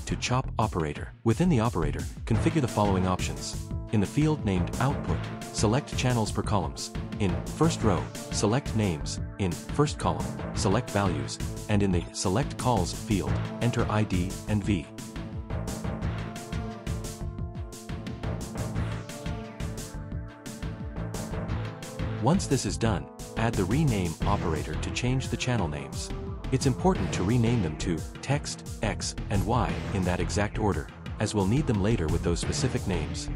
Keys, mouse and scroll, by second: 8.8 click, 11.2 click, 12.5 click, 14.5 i, 14.9 d, 15.3 Return, 16.6 click, 17.5 v, 18.0 Return, 18.8 Return, 20.0 click, 21.7 right click, 24.8 click, 25.9 click, 28.3-30.0 typing, 30.7 Return.